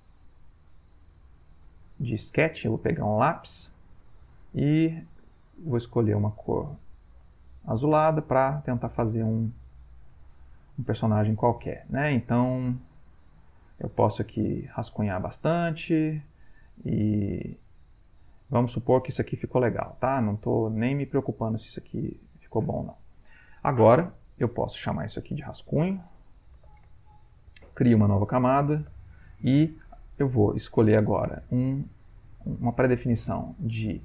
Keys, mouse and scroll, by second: 2.2 click, 3.9 click, 5.5 right click, 6.8-7.9 drag, 8.2 click, 9.6 shift+click, 10.8 click, 12.7-15.3 drag, 16.0 click, 16.9 click, 18.1 click, 19.7-21.4 drag, 25.5-27.1 typing, 28.9 Insert, 30.7 right click, 32.2 click, 33.9 click.